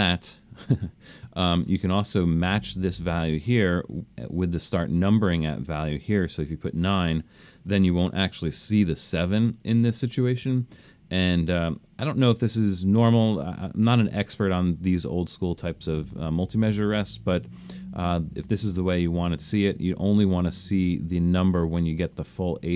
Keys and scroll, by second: 6.2 9.